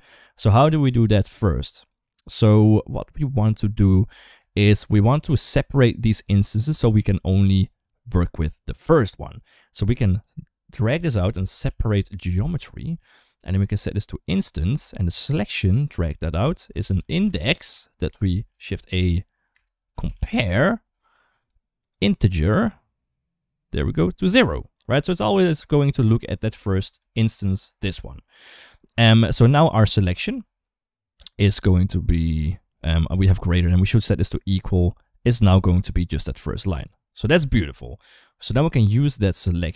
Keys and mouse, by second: 1.0 click, 2.2-3.8 drag, 4.0 shift+middle click, 4.5 shift+middle click, 5.1 shift+middle click, 10.0 click, 10.3-12.9 drag, 13.3 click, 14.6 shift+middle click, 15.4-17.9 drag, 18.1 shift+a, 21.6 click, 23.6 click, 23.8 click, 25.2 click, 25.8 click, 26.8 d, 26.9 click, 27.4 d, 27.9 ctrl+z, 29.1 click, 29.4 middle click, 30.0 ctrl+shift+click, 33.2-34.3 drag, 37.1 ctrl+x, 37.7 middle click, 38.9 click.